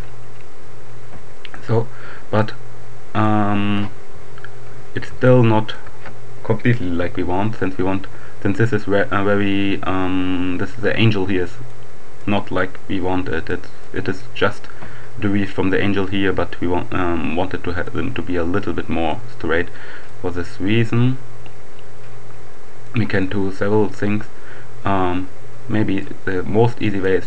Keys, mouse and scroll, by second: 2.4-3.7 drag, 5.3-6.3 shift+drag, 11.7-12.7 right drag, 13.9 right click, 17.5-19.7 right drag, 20.1-23.4 drag, 25.7 right click.